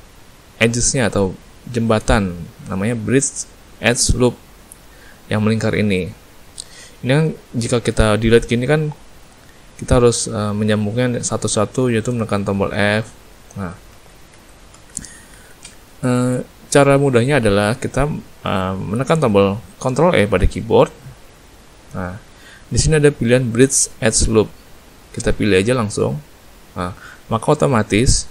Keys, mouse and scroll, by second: 5.8 middle click, 7.0 middle click, 9.7 click, 10.6 click, 11.6 shift+click, 12.7 f, 13.9 ctrl+z, 14.3 ctrl+z, 14.7 ctrl+z, 15.3 ctrl+z, 16.1 middle click, 19.0 middle click, 20.2 ctrl+e, 27.5 middle click.